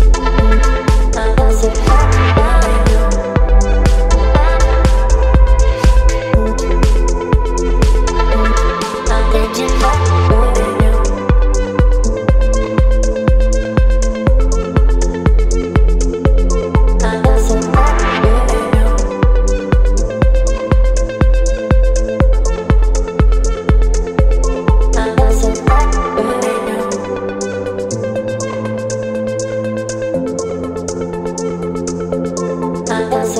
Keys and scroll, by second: 9.1 v, 9.7 Down, 12.9 Down, 15.3 ctrl+e, 19.9 space, 23.2 ctrl+t, 33.0 Return.